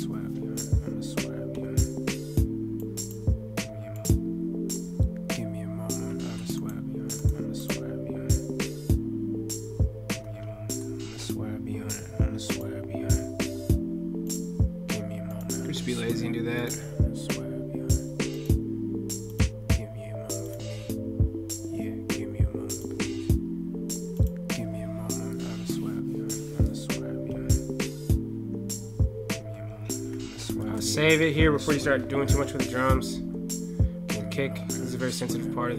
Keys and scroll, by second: 6.0 ctrl+F8, 10.2 ctrl+F8, 29.5 ctrl+F8.